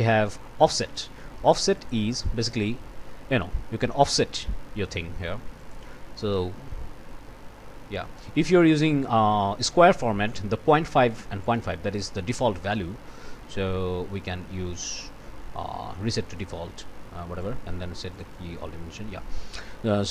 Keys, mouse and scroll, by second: 1.7 click, 2.7-3.3 scroll up 2, 3.6 scroll down 1, 4.1-4.6 scroll down 1, 5.6 click, 6.2 scroll up 1, 7.0 scroll up 2, 7.6-7.9 scroll down 2, 11.4 right click, 16.3 click, 17.4 right click, 18.1 click.